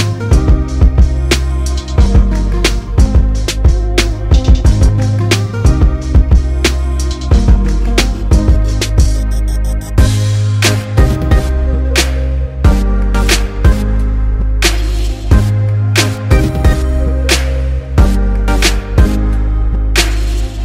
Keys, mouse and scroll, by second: 1.9-6.4 drag, 8.4 click, 12.3 click.